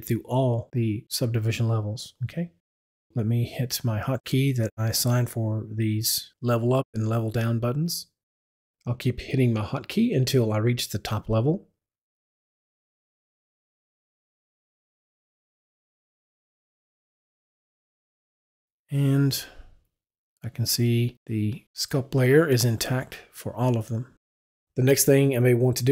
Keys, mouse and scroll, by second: 8.8 w, 9.1 Up, 10.0 Up, 11.0 Up, 12.0 Up, 13.1 Up, 14.7 Up, 16.9 Up, 20.4 Up, 20.6 click, 21.8 click, 23.0 click.